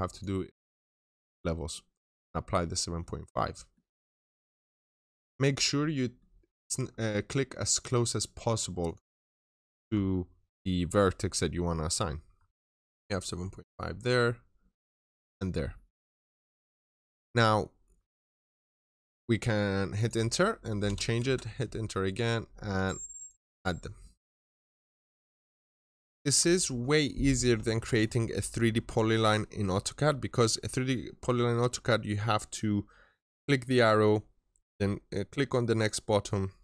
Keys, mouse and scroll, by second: 0.3 scroll down 1, 0.5 middle click, 1.0-1.9 scroll up 1, 1.9 click, 2.4-2.8 scroll down 1, 2.8 middle click, 3.2 scroll down 1, 3.4 middle click, 3.6 scroll up 1, 4.5 click, 4.9 double click, 5.5 scroll down 1, 5.8 middle click, 6.1 scroll down 1, 6.4 middle click, 6.6-7.5 scroll up 1, 7.5 click, 8.0 middle click, 8.3-8.7 scroll up 1, 8.7 click, 9.1-10.6 scroll down 2, 9.1 middle click, 11.6 middle click, 12.2-12.9 scroll up 1, 12.9 click, 13.2 middle click, 14.1-14.7 scroll up 1, 14.7 click, 15.1 double click, 15.6 middle click, 15.8 scroll down 1, 16.1 middle click, 16.4-16.8 scroll down 1, 16.8 middle click, 17.8-18.2 scroll up 1, 18.2 right click, 19.3 click, 20.7-23.5 typing, 21.8 scroll up 1, 22.6 click, 23.0 double click, 23.6 middle click, 23.9-24.3 scroll down 1, 24.3 middle click, 24.7-25.2 scroll up 1, 25.2 click, 25.6 double click.